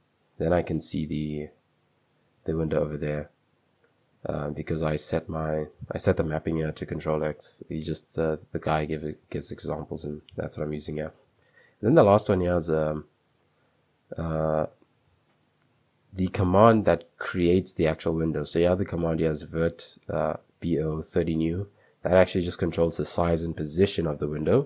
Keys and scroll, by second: 2.4 a, 3.2 Escape, 3.9 u, 4.5 super+2, 5.9 j, 6.2 k, 8.9 k, 9.4 k, 10.6-11.7 typing, 13.8 b, 14.1 b, 16.7 typing, 20.3 l.